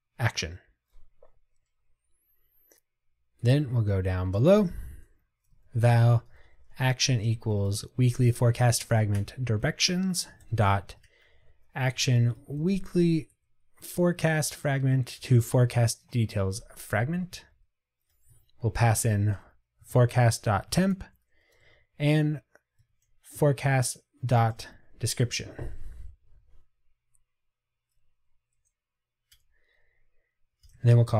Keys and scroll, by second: 0.1 Tab, 9.3 Return, 15.3 Return, 19.9 Tab, 24.5 Tab, 24.7 Return.